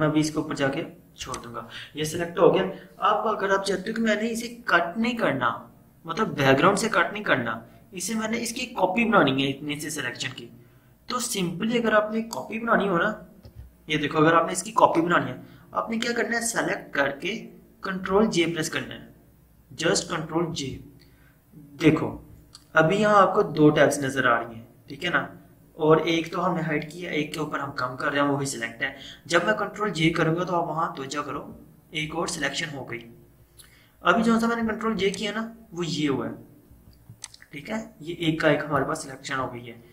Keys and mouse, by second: 1.2 click, 13.6 ctrl+0, 18.2 ctrl+0, 20.6 ctrl+j, 22.2 ctrl+z, 30.1 ctrl+z, 31.3 ctrl+j, 35.1 click, 36.8 v, 37.1-39.9 drag.